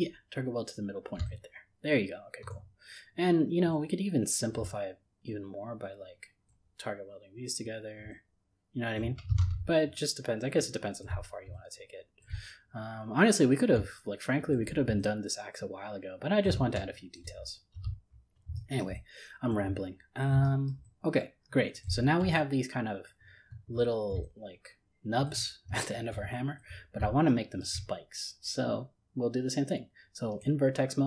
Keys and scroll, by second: 9.4 ctrl+z.